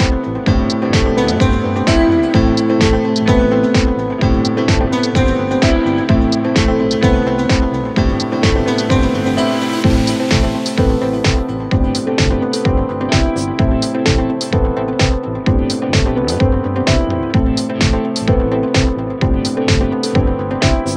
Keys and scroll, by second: 6.2 F3, 14.5 ctrl+v, 15.3 c, 15.9 shift+F2.